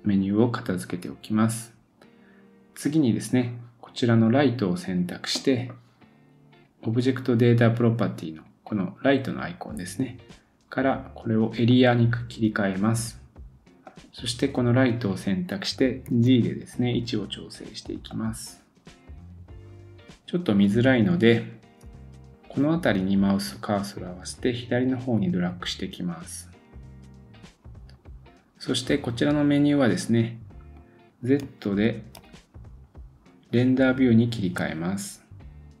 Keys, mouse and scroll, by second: 4.2 middle click, 4.2 right click, 6.1-11.9 drag, 11.7 middle click, 11.7 right click, 13.8 click, 13.8 middle click, 13.8 right click, 16.1 g, 16.8-35.8 drag, 24.1-35.8 middle drag, 24.1-35.8 right drag.